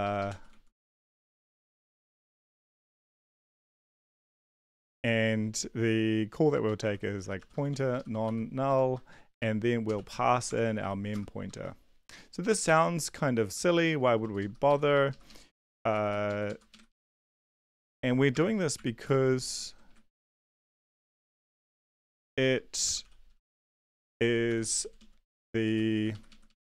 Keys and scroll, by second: 0.0-5.2 typing, 0.0 Left, 4.1 End, 6.6-11.5 typing, 12.6 Return, 13.8 Down, 14.0 Down, 14.2 Down, 14.6 End, 15.1 ctrl+shift+Left, 15.3 ctrl+shift+Left, 15.7 ctrl+x, 15.9 Up, 16.1 Up, 16.3 Up, 16.7 Right, 17.5 ctrl+Left, 17.7-23.8 typing, 19.8 Right, 23.8 Down, 24.0 Tab, 24.5 ctrl+v, 24.8 Down, 25.0 Down, 25.3-26.6 typing.